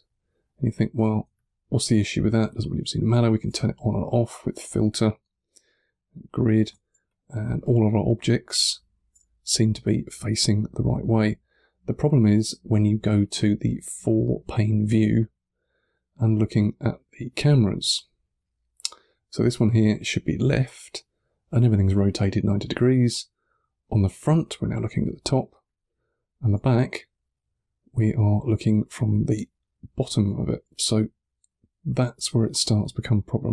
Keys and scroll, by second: 1.1 1, 2.1 2, 6.8 3, 26.6 2, 29.1 1.